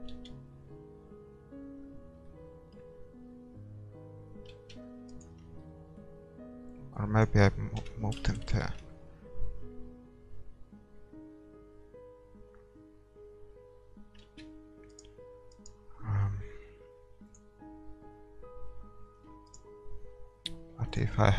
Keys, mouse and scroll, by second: 0.3-2.4 drag, 0.3 shift+z, 2.4 middle click, 4.4 middle click, 5.6-7.7 middle drag, 5.6-6.7 right drag, 6.7-8.9 drag, 7.8 KP_0, 8.3-10.5 middle drag, 8.9 shift+z, 11.7 shift+z, 15.0-19.2 right drag, 19.2 a, 19.6-21.3 right drag.